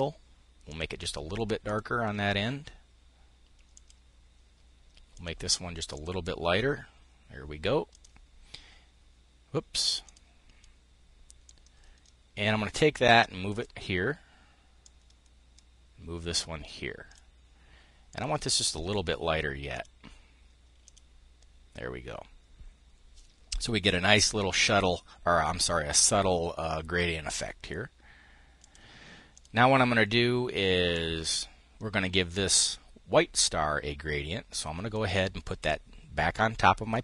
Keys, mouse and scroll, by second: 0.2 click, 1.2 click, 3.3 click, 4.7-5.8 drag, 7.4-8.9 drag, 9.6 click, 11.0-19.6 drag, 20.5 click, 28.2-29.5 drag, 30.5-34.4 drag, 34.5 click, 35.3 click, 36.5 click.